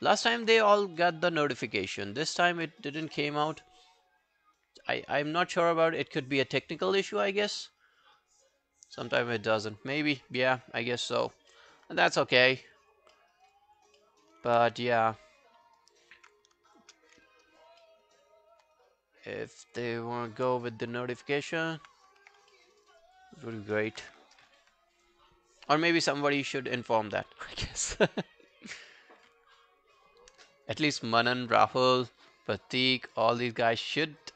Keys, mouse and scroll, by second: 5.2 alt+click, 9.0 alt+click, 11.1 alt+click, 11.5 alt+middle click, 11.8 alt+right click, 12.0 alt+click, 12.3 alt+middle click, 12.6 alt+right click, 12.8 alt+click, 13.2 alt+middle click, 13.3 alt+right click, 13.6 alt+click, 14.0 alt+middle click, 14.2 alt+right click, 14.6 q, 14.8 right click, 16.7 shift+click, 17.3 alt+click, 17.8 alt+middle click, 18.0 alt+right click, 18.8 right click, 20.5 3, 21.4 alt+scroll down 1, 21.6 alt+click, 22.5 alt+middle click, 22.8 alt+right click, 23.0 alt+click, 32.6 alt+click, 33.0 alt+right click, 33.3 alt+middle click, 33.5 alt+right click, 33.7 alt+click.